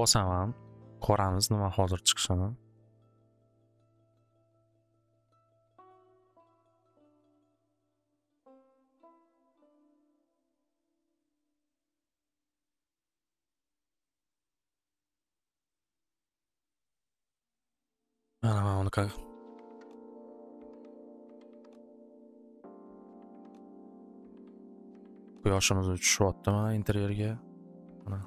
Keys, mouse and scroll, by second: 2.9-4.0 right drag, 12.9 click, 13.5 click, 22.7-24.1 middle drag, 25.7 middle click, 28.2 middle click.